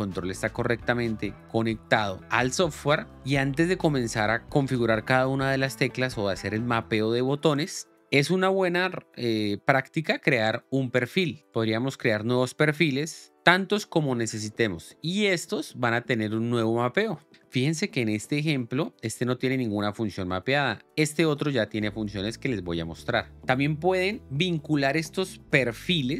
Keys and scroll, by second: 13.3 Return.